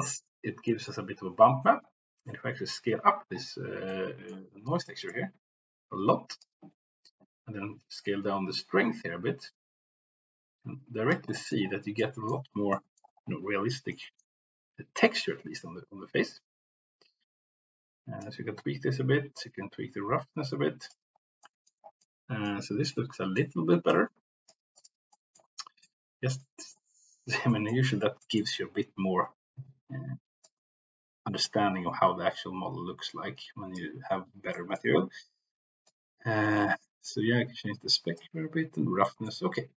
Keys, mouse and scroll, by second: 0.6 middle click, 3.9 middle click, 5.0-6.5 drag, 7.9-11.0 drag, 11.3 middle click, 12.1 middle click, 12.8 middle click, 13.9 middle click, 15.2-18.1 drag, 19.3-20.9 drag, 21.5 middle click, 22.0 middle click, 22.8-23.5 middle drag, 23.8 click, 25.1 middle click, 25.9-26.5 middle drag, 26.7-27.1 middle drag, 27.5 middle click, 28.1 middle click, 30.4-33.7 drag, 34.7 middle click, 35.9-38.3 drag, 39.2 middle click.